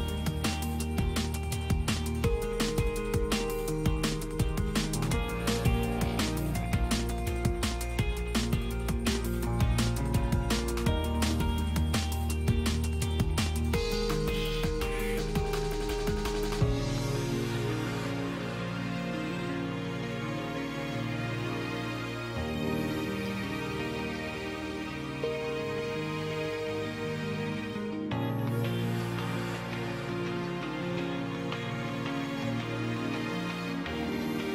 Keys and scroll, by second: 20.0 space, 21.8 space.